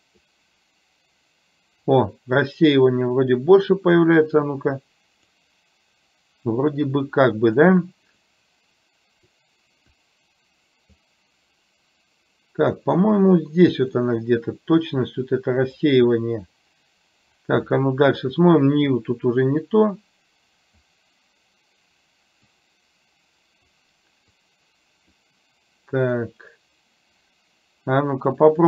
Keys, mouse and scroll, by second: 4.6 click, 7.2 click, 8.3-9.6 drag, 9.9-11.1 drag, 13.2-14.2 drag, 15.2 click, 19.8-20.9 drag, 22.7-23.9 drag, 24.6 click.